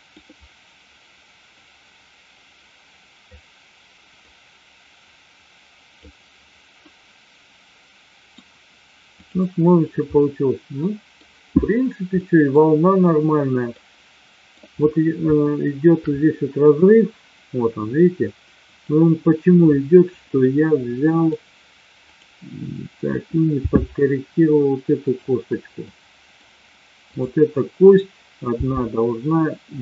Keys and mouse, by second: 1.7-3.3 drag, 4.3-6.0 drag, 6.8-8.3 middle drag, 9.1 click, 10.1-11.1 middle drag, 12.1-12.4 middle drag, 13.7-14.4 middle drag, 15.4-15.8 shift+middle drag, 18.7 click, 20.3-21.2 middle drag, 22.1 click, 23.6 g, 25.8-26.3 middle drag, 27.1 click, 28.6 g.